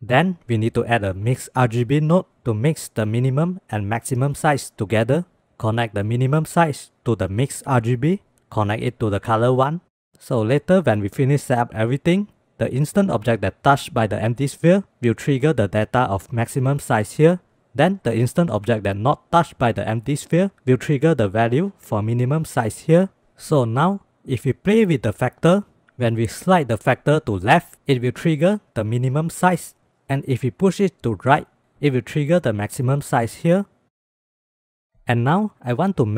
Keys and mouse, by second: 0.2 shift+a, 6.2-8.4 drag, 15.5-17.5 drag, 21.0-23.4 drag, 23.8-25.9 drag, 26.6 click, 28.0-29.0 drag, 31.2 click, 32.6-33.8 drag, 34.0 click.